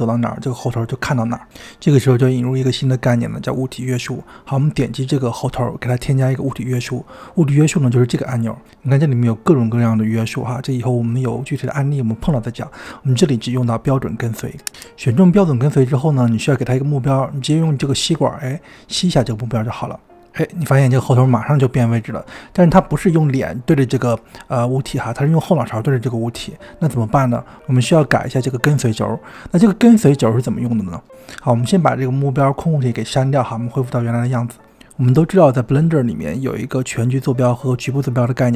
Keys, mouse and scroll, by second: 5.9 click, 7.4 click, 8.6-16.5 drag, 18.0 click, 21.0-24.0 middle drag, 34.0 click, 37.3 click.